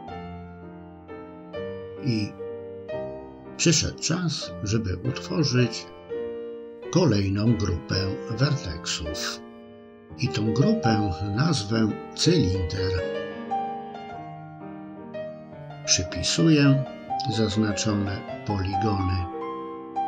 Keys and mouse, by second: 0.4-4.0 middle drag, 4.7 KP_3, 7.4 click, 9.1 click, 9.4-15.1 drag, 16.9 click, 18.2 click.